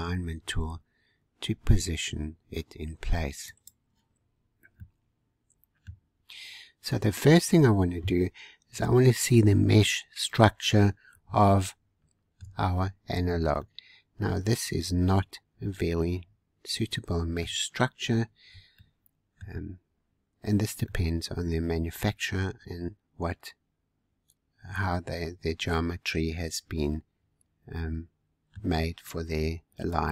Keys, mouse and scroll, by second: 3.5 click, 4.2-4.7 scroll down 3, 4.7-7.3 middle drag, 7.3-8.5 scroll up 4, 9.5 Tab, 10.6 scroll up 1, 11.5-16.6 shift+middle drag, 17.6-18.0 scroll down 2, 18.7-19.9 shift+middle drag, 19.9-20.8 scroll up 1, 20.8-23.9 middle drag, 29.2-29.6 scroll down 2, 29.6 scroll up 1, 30.0-30.1 shift+middle drag.